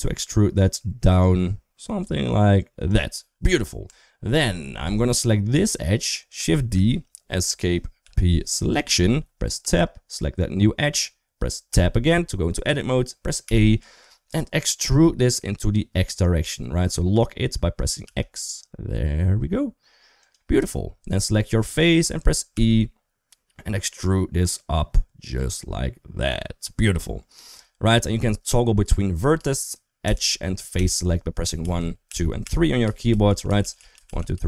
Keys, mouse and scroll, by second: 3.3 Tab, 3.6 Tab, 4.1 middle click, 4.6 2, 5.4 click, 6.3 shift+d, 7.8 p, 9.4 Tab, 11.5 Tab, 13.2 a, 14.7 e, 20.9 3, 21.4 click, 22.3 e, 29.2-34.4 typing.